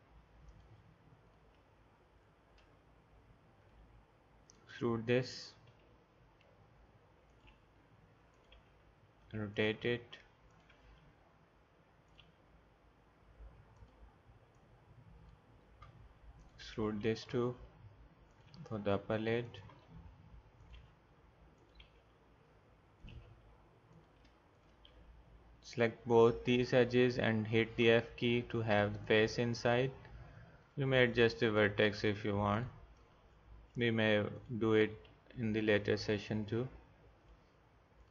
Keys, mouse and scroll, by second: 2.7 middle click, 5.7 e, 7.5 r, 8.6 e, 9.6 r, 10.7 e, 12.2 r, 17.2 e, 18.5 r, 19.7 e, 20.7 r, 21.8 e, 23.1 r, 27.8 f, 31.9 g, 33.4 middle click, 33.6 middle click, 34.8 g.